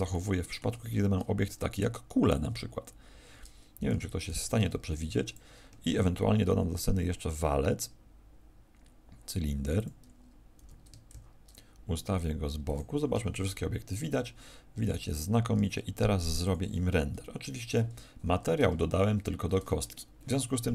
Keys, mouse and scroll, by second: 0.0 middle click, 1.3 shift+a, 5.2 click, 6.4 shift+a, 12.7 click, 13.1 KP_0, 15.0 right click, 15.5 g, 16.4 click.